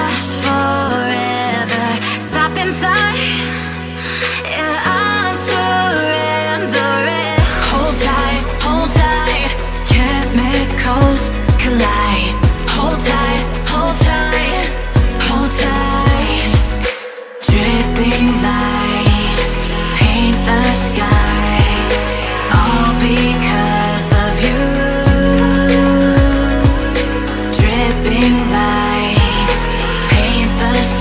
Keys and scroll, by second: 13.8 BackSpace, 14.7 a, 16.5 Left, 17.1 BackSpace, 18.8 Right, 19.5 Right, 21.2 v, 25.0 space, 25.5 alt+super+space, 25.5-26.1 alt+super+space, 30.4-31.0 typing.